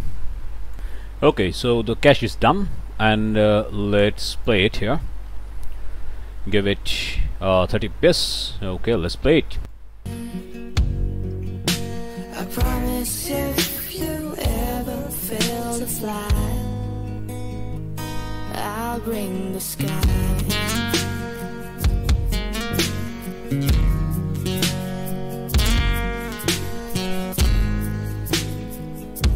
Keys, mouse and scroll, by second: 0.7 click, 4.4 click, 9.6 click.